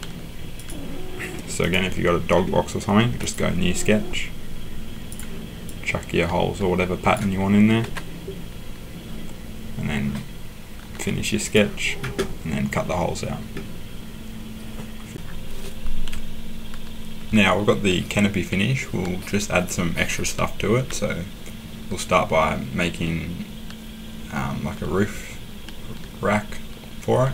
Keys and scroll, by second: 7.8 Escape.